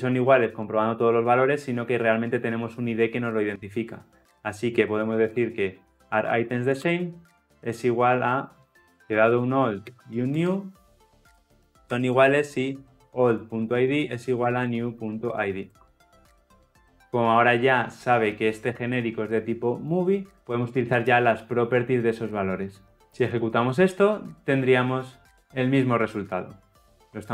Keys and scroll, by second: 6.8 Return, 15.7 Return, 16.3 ctrl+alt+l, 16.4 ctrl+alt+o, 23.2 shift+F10.